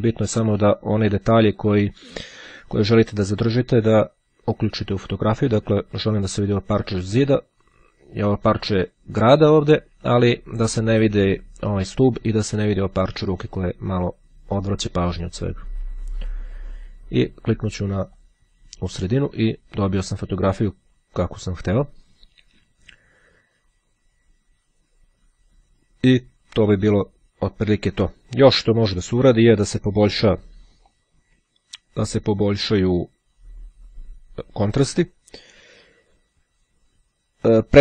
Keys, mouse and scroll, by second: 14.7-17.2 drag, 17.9-18.9 drag, 29.3 click.